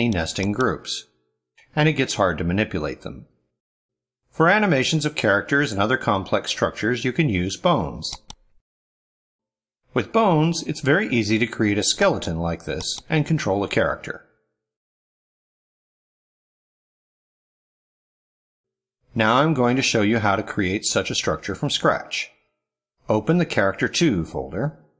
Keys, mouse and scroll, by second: 0.5 click, 1.5 click, 8.0 click, 11.8 click, 12.7 click, 14.1 click, 14.9 click, 15.4 click, 16.0 click, 16.9 click, 19.0 click, 20.2 click, 21.6 click, 24.2 click.